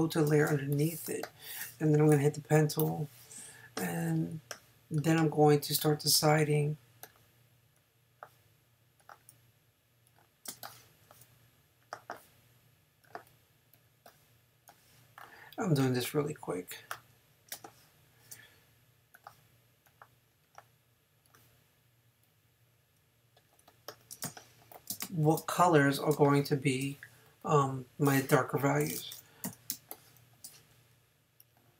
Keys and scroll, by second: 2.8 p, 25.0 space, 26.1 space, 29.5 n.